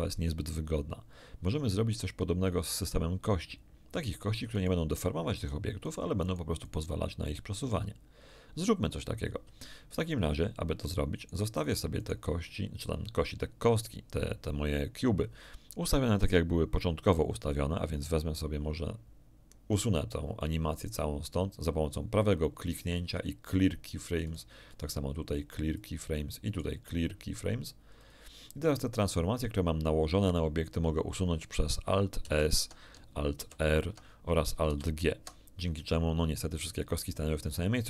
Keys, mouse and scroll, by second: 4.5 right click, 5.3 right click, 5.8 right click, 6.2 right click, 11.1 shift+right click, 11.6-12.3 shift+right drag, 20.7 right click, 23.5 click, 24.2 right click, 25.7 click, 26.4 click, 27.9 click, 32.2 alt+s, 33.3 alt+r, 34.6 alt+g, 37.7 ctrl+z.